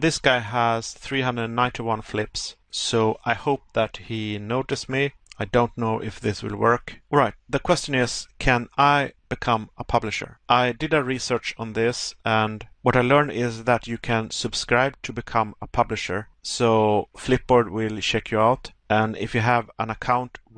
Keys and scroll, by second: 0.8 Pause, 11.4 Pause, 16.7 Pause, 19.1 Pause.